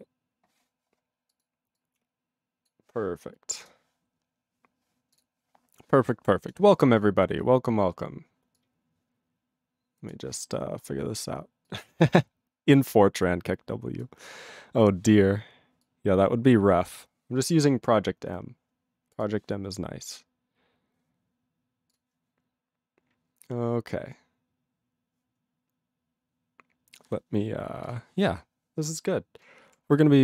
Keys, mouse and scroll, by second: 6.5 click, 17.0 click.